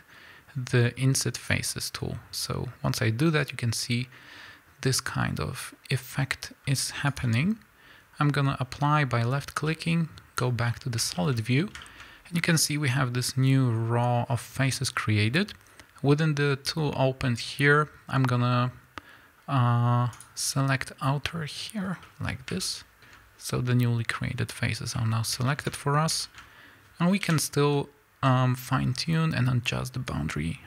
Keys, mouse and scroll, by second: 1.5 ctrl+f, 10.4 z, 10.7-20.1 middle drag, 11.6-12.1 scroll up 2, 14.3-15.0 scroll down 2, 15.0-20.1 scroll up 2, 20.1 click, 21.9-22.6 scroll down 3, 22.0-28.3 middle drag, 25.7-26.2 scroll up 2, 26.4-27.2 scroll down 2, 27.2 KP_1, 28.3 z, 28.5 scroll up 1, 30.3-30.6 drag.